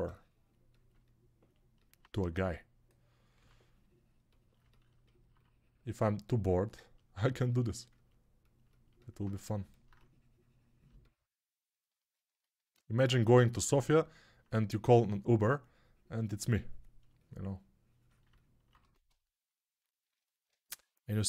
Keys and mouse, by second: 2.1 1, 3.3 3, 9.2 3, 10.8-14.3 alt+drag, 10.8-14.3 alt+right drag, 18.7 1.